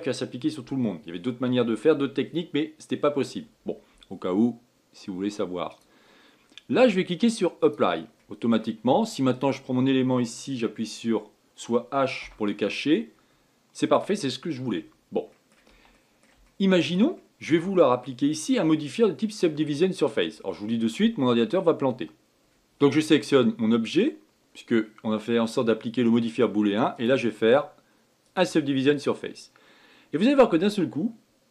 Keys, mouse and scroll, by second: 6.4-8.9 drag, 8.9 middle click, 9.4-10.1 scroll up 2, 10.1 click, 12.9 h, 13.5-14.9 middle drag, 14.9-15.3 scroll up 2, 15.3-16.0 scroll down 2, 16.0-21.6 middle drag, 22.4-23.9 middle drag, 23.9 click, 26.2-27.7 middle drag, 27.7-31.5 drag.